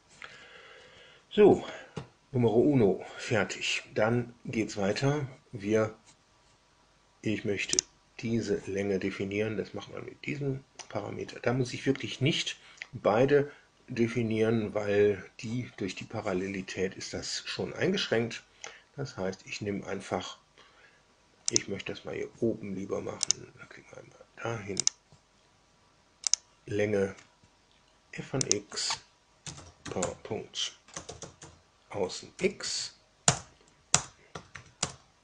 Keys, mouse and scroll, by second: 7.7 click, 21.4 click, 23.2 click, 24.8 click, 26.2 drag, 28.3 click, 29.1-31.8 typing, 32.2 Down, 32.6 Down, 33.2 Return, 34.2 Tab, 34.4 Tab, 34.8 Return.